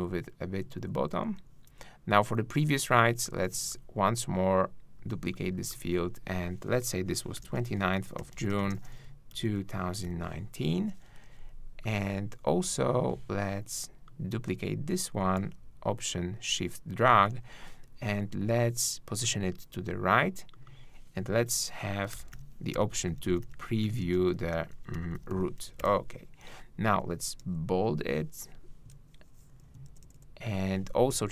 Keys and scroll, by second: 25.7 super+e, 25.8 super+Return, 27.4 super+b, 29.5 shift+Left, 29.9 shift+Right.